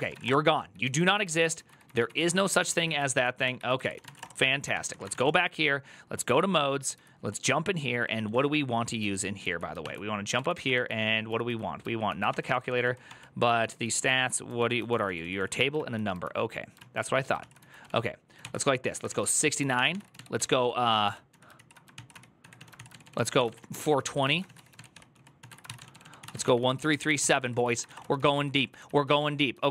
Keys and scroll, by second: 0.0-0.4 typing, 0.6 ctrl+j, 0.8 ctrl+j, 1.2 ctrl+j, 1.5 ctrl+j, 1.5 ctrl+k, 1.6 ctrl+k, 1.9 ctrl+j, 2.0 ctrl+k, 2.1 ctrl+j, 2.2 ctrl+k, 2.9 ctrl+w, 3.2 ctrl+o, 3.2 ctrl+,, 3.6-4.9 typing, 4.5 ctrl+s, 4.7 ctrl+c, 4.9 Return, 6.7-8.8 typing, 9.6 ctrl+n, 9.9-11.7 typing, 12.1 ctrl+d, 12.4 ctrl+d, 13.2-15.5 typing, 15.5 ctrl+o, 16.5 ctrl+o, 17.1-29.7 typing.